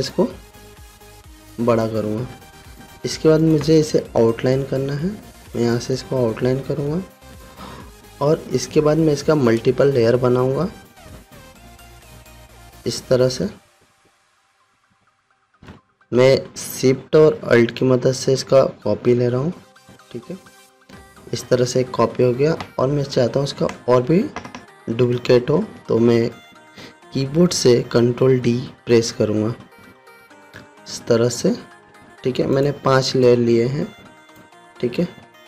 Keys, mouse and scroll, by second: 0.7-2.5 alt+shift+drag, 13.5-22.0 drag, 30.4 ctrl+d, 32.6 ctrl+d, 33.1-35.0 drag.